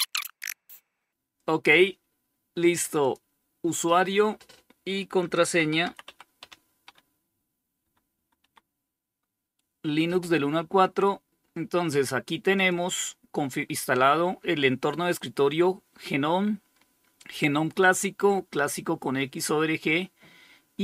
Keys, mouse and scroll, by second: 2.2 click, 4.2-8.1 typing, 11.8 click.